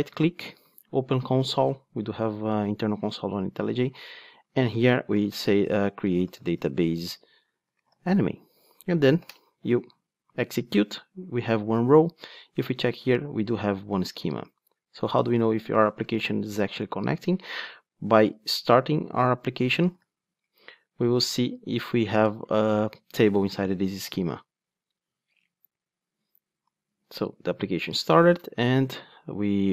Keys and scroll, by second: 0.9 super+Down, 6.5 Return, 9.3 super+Return, 19.9 ctrl+r, 29.6 super+r.